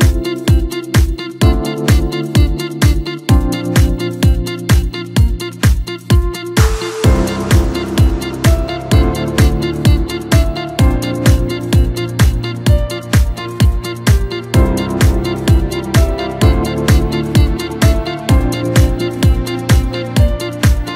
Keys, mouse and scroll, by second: 3.6 click, 5.7-6.7 drag, 6.7-8.6 middle drag, 8.6 drag, 9.3 click, 11.3-12.4 drag, 13.5-14.1 drag, 14.3-17.4 middle drag, 18.7-20.4 drag, 20.4-20.9 middle drag.